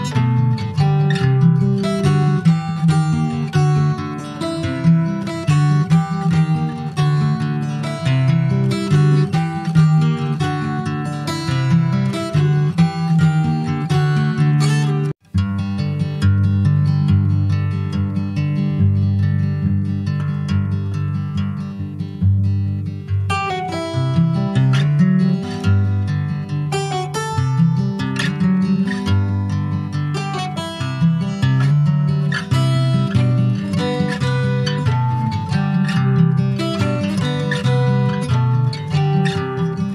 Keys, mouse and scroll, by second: 0.0 Tab, 0.3 scroll down 1, 0.6 middle click, 1.0 click, 1.3 scroll down 1, 1.5 middle click, 2.3 click, 2.6 scroll down 2, 2.8-4.0 middle drag, 4.0 scroll down 1, 4.2 middle click, 4.5-4.9 scroll up 1, 4.9 ctrl+s, 5.0 click, 5.3 shift+middle click, 5.5 shift+scroll up 1, 5.6 middle click, 6.2-7.4 alt+scroll up 2, 7.4 click, 9.2 click, 9.5 middle click, 10.1 ctrl+s, 10.1 click, 10.6 shift+click, 11.0 middle click, 11.3 click, 11.6-13.4 middle drag, 13.4 ctrl+a, 15.0 ctrl+j, 15.3 ctrl+click, 15.5 scroll down 3, 15.7 middle click, 16.0 click, 16.4-18.0 shift+middle drag, 18.0 ctrl+s, 19.6 middle click, 19.9 ctrl+s, 20.1 click, 20.3 click, 21.3 alt+middle click, 21.7-22.4 alt+scroll up 1, 22.4 alt+middle click, 23.3 alt+middle click, 23.9-25.5 middle drag, 25.5 Tab, 25.7 click, 25.9-26.4 scroll up 3, 26.4-27.5 middle drag, 28.8 l, 29.8 s, 31.4 s, 33.2 middle click, 33.5-34.2 scroll up 1, 34.2 s, 36.9 click, 38.7 alt+middle click, 39.1 alt+middle click.